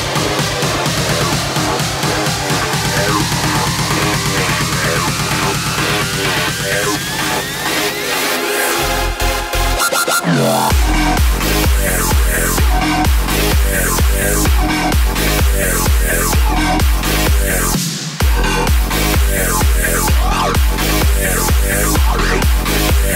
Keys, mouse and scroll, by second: 1.8 click, 4.2 x, 4.9 scroll up 1, 5.4-9.3 shift+middle drag, 9.3-10.2 scroll down 3, 10.2 KP_7, 10.8-11.6 scroll down 3, 11.6 z, 11.9-12.8 scroll up 4, 12.8 click, 13.5 click, 14.0 s, 17.0 KP_0, 18.0 z.